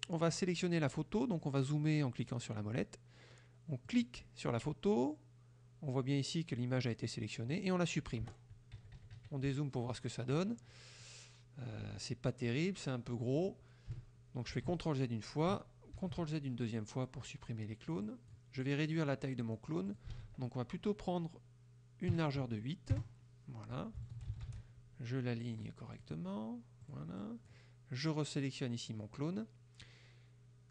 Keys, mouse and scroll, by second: 0.6 middle click, 3.9 click, 8.3 Delete, 8.8 KP_Subtract, 11.1 middle click, 14.6 ctrl+z, 16.1 ctrl+z, 18.2-18.6 drag, 20.0 ctrl+click, 20.2 ctrl+a, 22.2 KP_8, 23.0 KP_Enter, 24.2 ctrl+shift+click, 24.6 ctrl+shift+a, 25.6 click, 26.0 click, 26.9 click, 27.3 click.